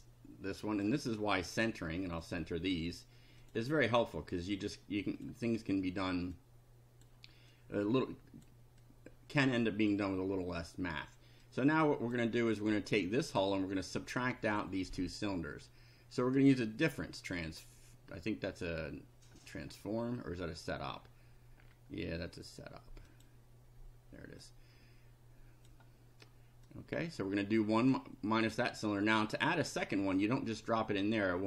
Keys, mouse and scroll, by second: 0.8 click, 2.2 click, 3.4 click, 4.0 click, 5.2 click, 6.3 click, 7.6-8.6 drag, 8.9 click, 11.4 click, 16.4 click, 20.0 scroll down 1, 20.9 scroll down 1, 21.6-21.9 scroll down 1, 23.1 click, 24.4-25.9 drag, 26.7-28.1 drag, 30.2-31.4 drag.